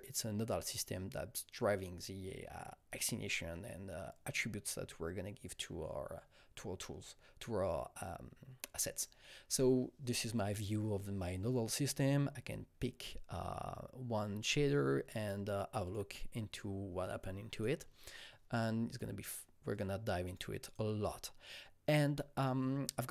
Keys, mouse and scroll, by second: 12.0 click, 12.0 scroll down 1, 15.8 click, 15.8-17.5 scroll down 1, 17.5 click, 18.9 click, 19.3 click, 20.3 click, 20.6 click.